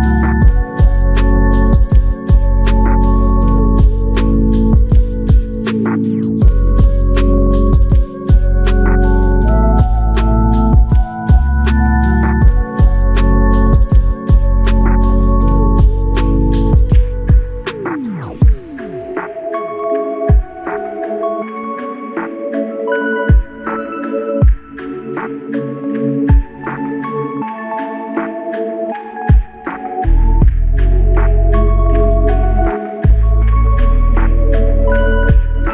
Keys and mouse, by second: 16.2 shift+click, 23.8 ctrl+click, 24.4 shift+click, 25.3 shift+l, 28.2 alt+click.